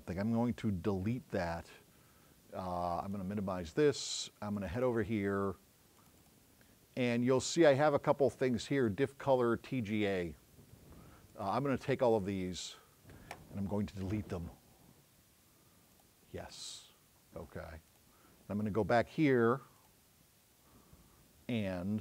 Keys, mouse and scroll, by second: 3.1 click, 4.6 click, 6.0 click, 6.3 click, 11.4 click, 12.7 click, 16.0 click, 18.0 click, 19.9 click.